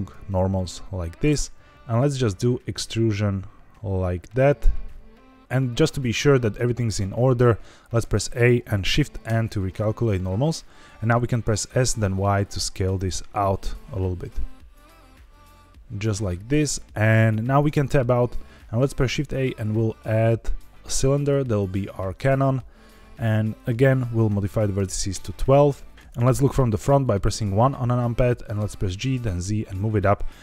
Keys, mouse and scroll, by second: 7.9 a, 9.2 shift+n, 11.6 s, 11.8 y, 16.1 click, 17.6 Tab, 19.0 shift+a, 23.5-25.0 drag, 25.9 middle click, 26.7 KP_1, 27.9 shift+middle drag, 28.5 g, 29.1 z.